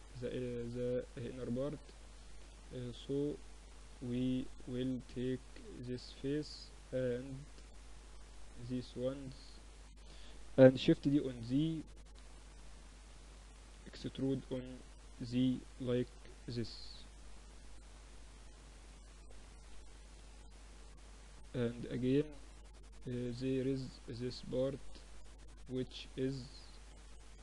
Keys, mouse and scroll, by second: 3.9 click, 4.5-5.9 middle drag, 5.9 click, 6.4 middle click, 7.0-10.9 drag, 10.1 shift+d, 12.9 e, 18.9 Tab, 20.8 Tab, 21.9 Tab, 22.2-24.2 middle drag.